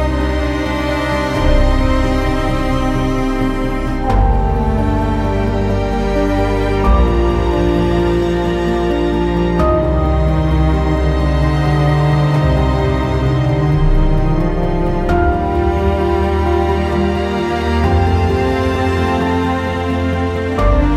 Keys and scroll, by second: 20.7 ctrl+z.